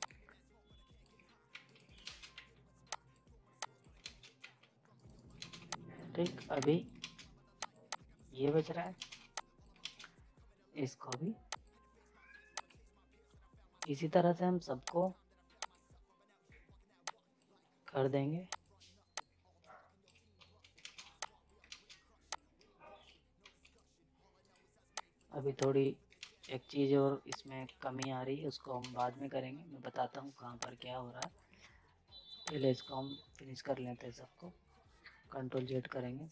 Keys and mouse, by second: 1.5 z, 1.6 right click, 2.0 ctrl+space, 2.3 z, 2.9 click, 4.0 ctrl+space, 4.4 z, 4.9 right click, 5.4 ctrl+space, 5.6 z, 5.7 click, 6.2 ctrl+space, 6.5 z, 6.6 click, 7.0 ctrl+space, 7.6 click, 8.4 ctrl+z, 8.8 right click, 9.0 ctrl+space, 9.2 z, 9.3 click, 9.8 ctrl+space, 11.1-20.4 drag, 20.4 z, 20.6 right click, 20.8 space, 21.0 z, 21.2 click, 21.6 ctrl+space, 22.3 click, 23.4 z, 23.6 right click, 24.9 click, 26.2 ctrl+space, 27.3 click, 27.6 z, 28.0 click, 28.8 space, 30.6 click, 35.5 ctrl+z.